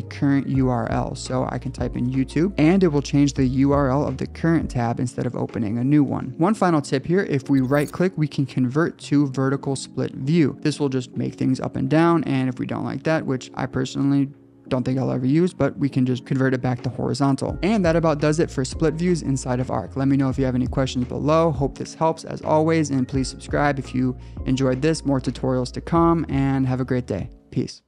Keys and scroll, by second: 2.2 Return.